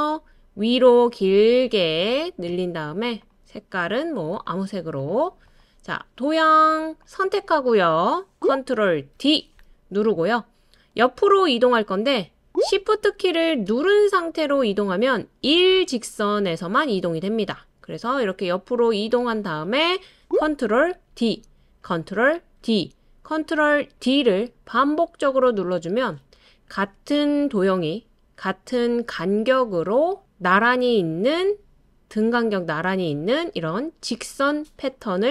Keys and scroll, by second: 9.1 super+d, 21.1 super+d, 22.6 super+d, 24.0 super+d, 25.5 super+d.